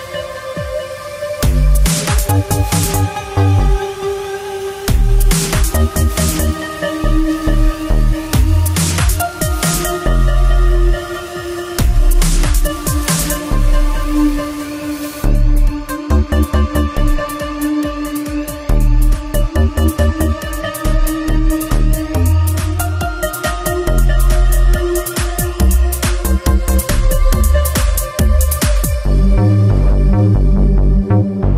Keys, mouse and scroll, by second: 0.1 click, 0.8 shift+middle click, 2.9 click, 4.3 click, 5.0-5.6 shift+middle click, 6.5 shift+middle click, 15.1 shift+middle click, 16.0 c, 16.8 middle click, 17.4 scroll up 2, 17.7 shift+middle click, 18.4 middle click, 20.0 click, 21.5 click, 21.6 click, 25.9 middle click, 26.4 7, 27.1 scroll up 2, 27.4 shift+middle click, 28.0 shift+middle click.